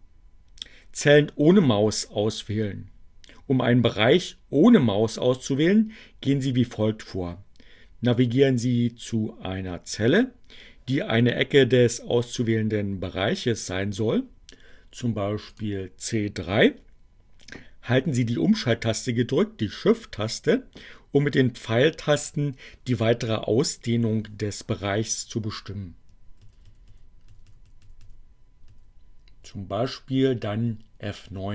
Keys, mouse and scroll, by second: 15.6 click, 26.7 shift+Right, 27.7 shift+Down.